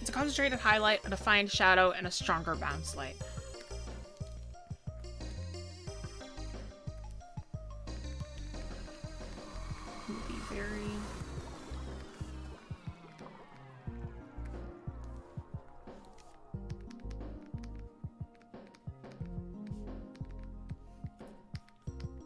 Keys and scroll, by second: 4.9 ctrl+z, 15.7 ctrl+z.